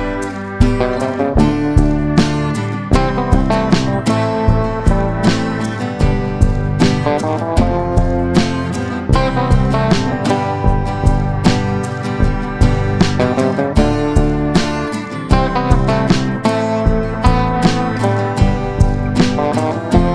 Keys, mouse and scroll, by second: 0.5 click, 2.4 click, 3.7 F9, 4.0-5.1 drag, 8.3-20.1 shift+drag.